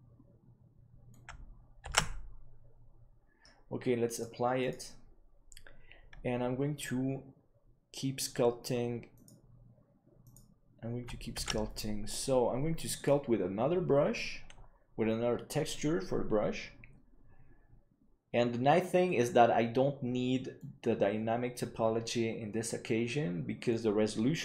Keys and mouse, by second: 2.8 ctrl+s, 4.1-7.0 drag, 12.4 ctrl+s.